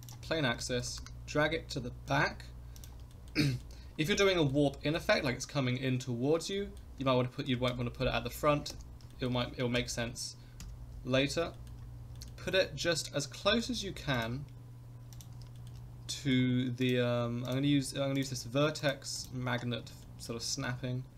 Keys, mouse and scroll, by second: 0.5 middle click, 0.8 g, 3.1 shift+middle click, 3.4 middle click, 4.0 shift+middle click, 4.3 middle click, 4.7 scroll down 1, 4.9 middle click, 6.5 middle drag, 7.6 g, 9.1 shift+middle click, 9.7 KP_1, 10.6 KP_3, 11.1 scroll up 2, 11.5 shift+middle drag, 11.8 scroll up 2, 12.1 shift+middle drag, 12.6 scroll up 1, 13.4 g, 15.1 click, 15.5 shift+middle drag, 15.9-16.2 scroll up 2, 16.2 shift+middle drag, 16.8-18.9 drag, 19.2 click, 19.8 scroll up 1, 20.0 shift+middle drag, 20.5-21.1 scroll up 2.